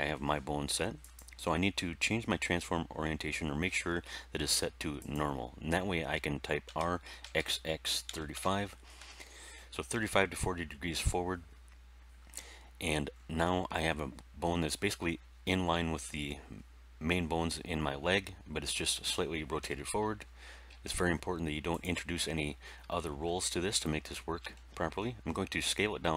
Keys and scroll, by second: 6.6 r, 8.0 3, 8.3 5, 8.9 Return, 19.5 End, 20.6 s.